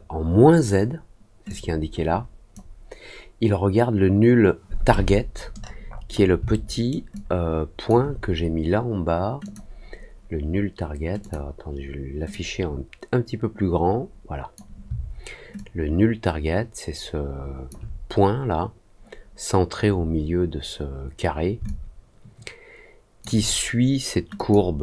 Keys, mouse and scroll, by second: 1.4-2.5 drag, 5.4-6.3 scroll up 3, 6.4 alt+middle click, 7.1 alt+click, 9.4 click, 11.1 click, 12.2-14.5 drag, 15.5-17.6 alt+drag, 21.6-23.1 alt+drag, 24.3 click.